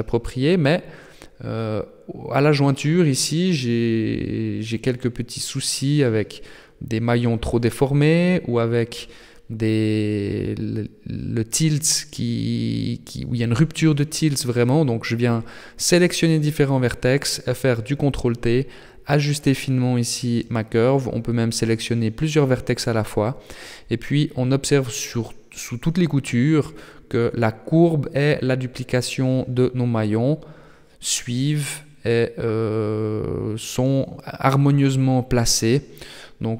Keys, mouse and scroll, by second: 0.7 shift+middle click, 1.1 scroll up 2, 1.4 scroll down 1, 1.6 Tab, 2.4 Tab, 3.4 right click, 3.8 shift+right click, 6.6 right click, 7.4 ctrl+t, 11.0 right click, 11.4 ctrl+t, 14.3 right click, 14.7 ctrl+t, 18.7 shift+right click, 19.0 shift+right click, 19.5 ctrl+t, 21.6 middle click, 26.0-27.5 scroll up 2, 27.5 right click, 28.5 right click, 29.4 ctrl+t, 31.6 shift+right click, 32.9 shift+right click, 33.9 shift+right click, 34.8 ctrl+t.